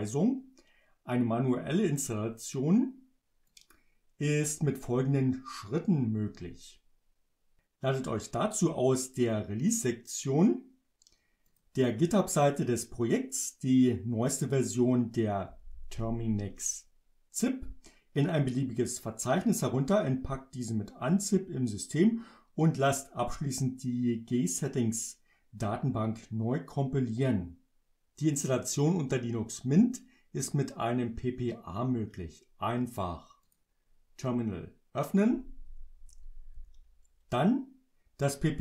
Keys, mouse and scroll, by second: 3.5 click, 11.5 click, 15.5 Down, 33.5 click, 35.3 Up.